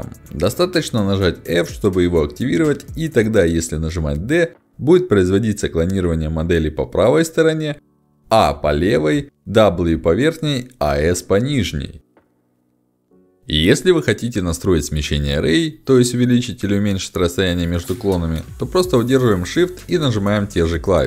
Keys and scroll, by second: 1.5 ctrl+alt+x, 3.5 f, 3.9 d, 4.7 a, 6.0 d, 7.5 s, 8.9 w, 10.3 s, 13.1 h, 16.6 d.